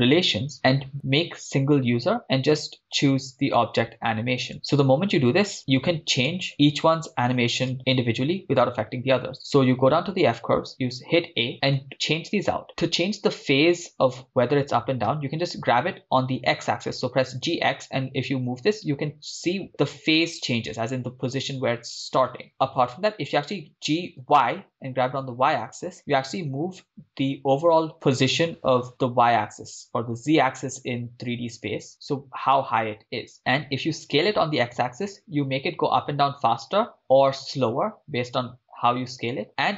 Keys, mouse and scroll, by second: 6.3 click, 6.3 right click, 9.9 a, 15.2 g, 15.9 x, 22.5 click, 23.8 g, 24.2 y, 33.4 right click, 34.0 s, 34.4 x, 39.3 click, 39.3 right click.